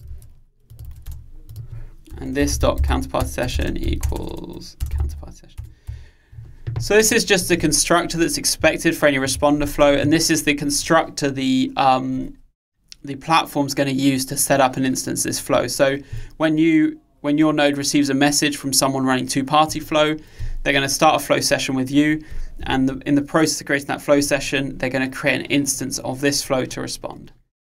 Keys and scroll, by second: 0.2 super+c, 0.9 super+v, 3.9 Return.